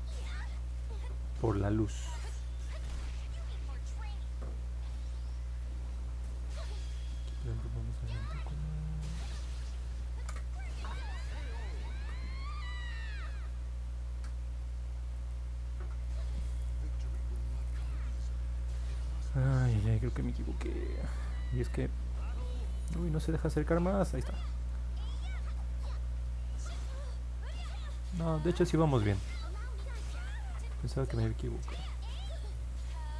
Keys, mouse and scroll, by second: 0.5 click, 1.0 click, 1.5 click, 4.0 click, 4.4 click, 5.7 click, 6.2 click, 10.0 ctrl+z, 13.5 click, 15.3 click, 17.0 middle click, 17.4 scroll down 1, 18.2-19.0 scroll up 3, 19.5-19.8 scroll up 2, 20.1 scroll down 1, 20.4-21.3 scroll up 3, 21.5-22.0 scroll down 2, 22.2 scroll up 1, 22.5 middle click, 22.9 middle click, 23.5 middle click, 24.0 middle click, 24.9 alt+middle click, 28.5 click, 28.7 click, 29.2 click, 29.7 click, 30.3 click, 30.8 click.